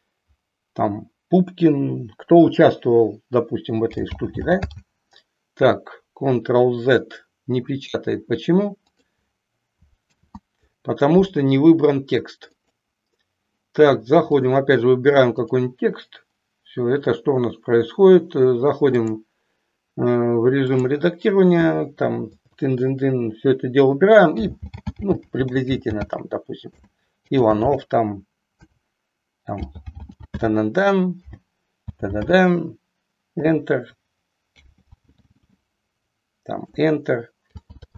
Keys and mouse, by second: 4.0 g, 4.2 g, 4.5 j, 9.9 ctrl+click, 10.2 ctrl+2, 12.5 click, 19.0-20.8 drag, 22.2 BackSpace, 22.5 BackSpace, 22.8 BackSpace, 22.9 BackSpace, 24.3-26.7 typing, 32.3 h, 33.3 Return, 34.4-35.5 typing, 36.7 Return, 37.5 j.